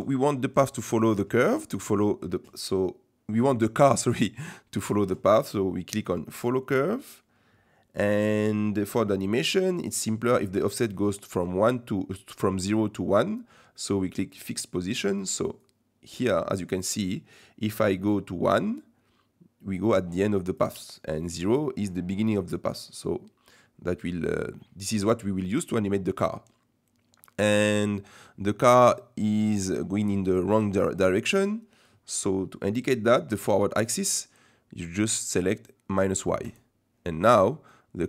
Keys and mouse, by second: 6.3 click, 14.4 click, 15.7-20.7 drag, 22.8-24.0 drag, 28.9 middle click, 29.8 shift+middle click, 36.4 click, 37.7-38.0 middle drag.